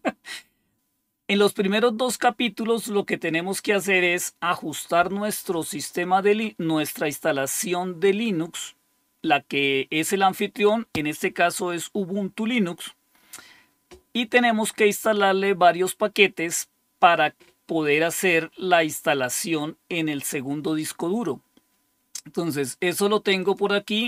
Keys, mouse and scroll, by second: 23.4 click.